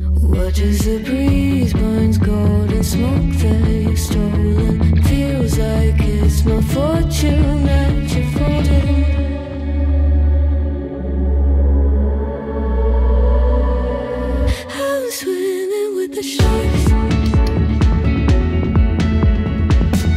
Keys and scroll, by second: 5.3 ctrl+z, 8.7 ctrl+z.